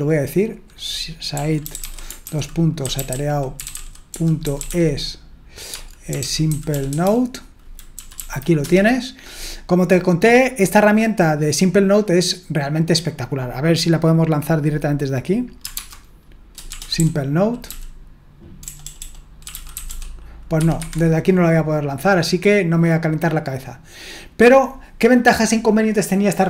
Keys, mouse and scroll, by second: 0.0-1.3 drag, 1.1-7.5 typing, 7.9 Down, 8.2 Down, 8.6 Return, 15.8 alt+space, 16.7-20.3 typing, 20.5 Escape, 20.8 Escape, 23.9 click.